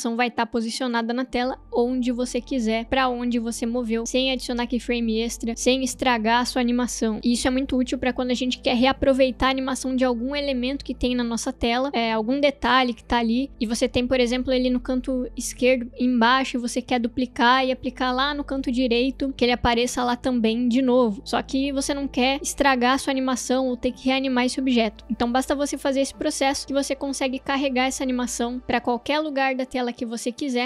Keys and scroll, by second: 0.4 space.